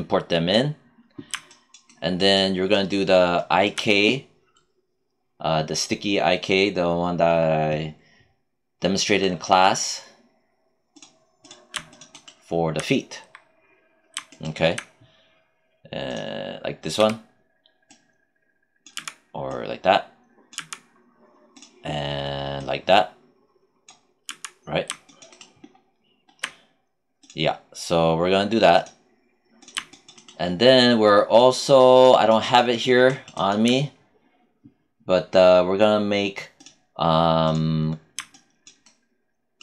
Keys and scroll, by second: 16.9 w, 18.9 z, 20.5 z, 24.2 z.